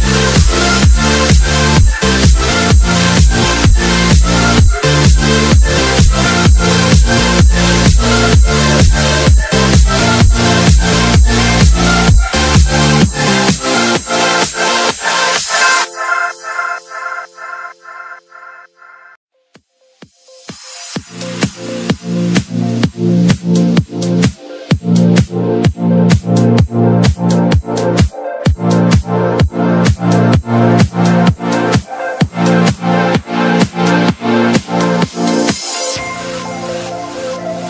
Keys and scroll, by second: 1.5 Escape, 4.6 Escape, 5.5 space, 7.3 Escape, 8.3 alt+c, 10.1 ctrl+z, 10.7 alt+c, 12.2 Escape, 14.8 c, 15.4 Escape, 17.1 F4, 18.5 Escape, 21.0 shift+F2, 22.0 Escape, 22.6 F3, 24.5 Escape, 25.7 b, 27.6 Escape, 33.9 l, 34.5 Escape.